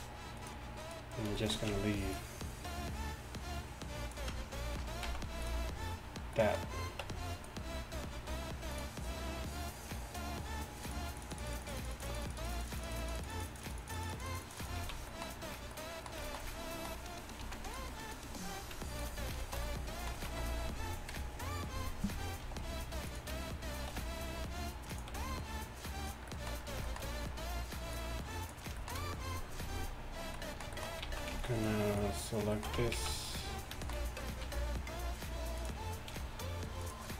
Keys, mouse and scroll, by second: 2.2-5.1 ctrl+drag, 5.1 x, 7.1 Tab, 14.9 z, 15.8 click, 15.9 click, 16.1-16.6 drag, 17.5 z, 20.2 z, 21.2 KP_3, 22.5 g, 24.0 r, 25.2 g, 26.4 g, 31.1 z, 31.4 z, 32.8 Tab, 33.0 z, 34.5 r, 36.2 g.